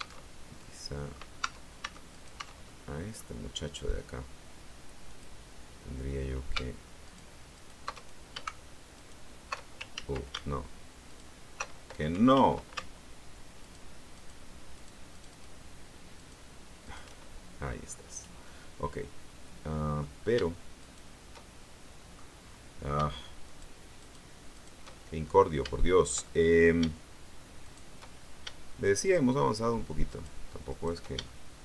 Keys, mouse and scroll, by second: 0.1 alt+Tab, 0.5 alt+middle click, 1.3 Tab, 2.0 right click, 2.5 middle click, 3.3-4.9 scroll up 2, 4.9 click, 6.9 alt+shift+right click, 7.5 alt+shift+right click, 7.9 alt+shift+right click, 8.9 alt+shift+right click, 9.8 ctrl+alt+shift+z, 10.9 alt+shift+right click, 12.2 ctrl+z, 13.5 alt+shift+right click, 14.0 alt+shift+right click, 14.6 alt+shift+right click, 15.0 alt+shift+right click, 16.1 alt+shift+right click, 16.7 alt+shift+right click, 17.7-18.1 scroll down 2, 18.3-20.1 middle drag, 20.7 shift+right click, 21.3-22.3 shift+middle drag, 23.3 shift+right click, 23.9 shift+right click, 24.4 shift+right click, 24.8 shift+middle click, 25.1-25.6 shift+scroll up 1, 25.6-26.7 shift+middle drag, 27.5 shift+right click, 28.9 shift+right click, 29.9 shift+right click, 30.6 shift+right click, 31.1 shift+middle click.